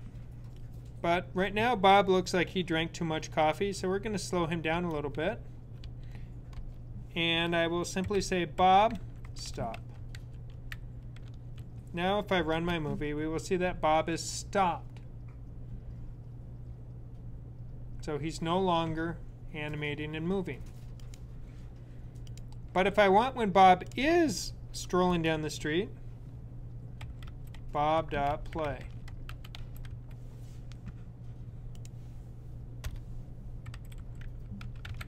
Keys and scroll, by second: 7.9-11.3 typing, 26.6-29.6 typing, 33.3-35.0 typing.